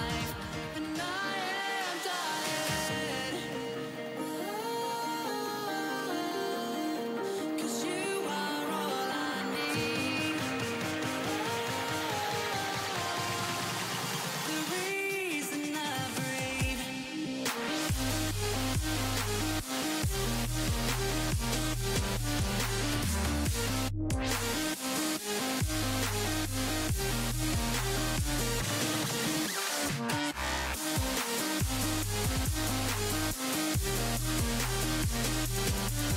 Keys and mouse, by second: 2.0 ctrl+r, 5.8 ctrl+r, 8.9 ctrl+r, 13.4-17.5 right drag, 14.1-15.3 drag, 15.5 g, 18.1-20.5 drag, 18.4 g, 19.7 g, 22.6 ctrl+r, 26.1 ctrl+r, 30.2 z, 31.1 c, 33.4 c, 33.9-35.8 drag, 33.9 z, 35.5 ctrl+e.